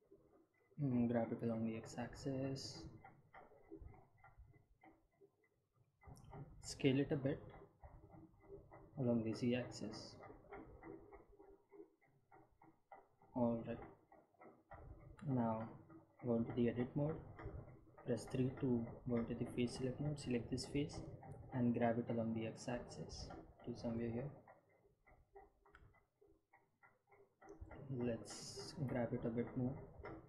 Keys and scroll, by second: 2.8 g, 3.9 x, 8.6 s, 10.7 z, 18.2 Tab, 19.8 3, 22.8 g, 23.2 x, 28.6 g, 29.2 x.